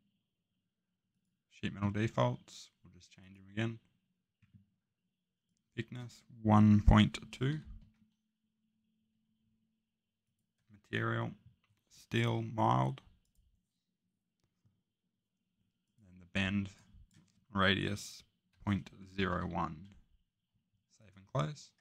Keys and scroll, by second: 6.5-7.8 typing, 18.2-19.3 typing.